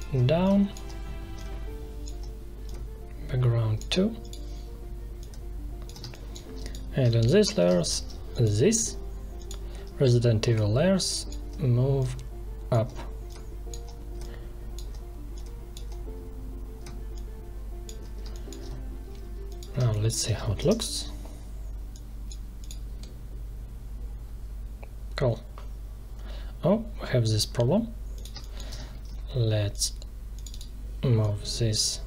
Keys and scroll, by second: 5.9 space, 18.2 space, 19.7 space, 20.5 ctrl+Return, 28.3 space.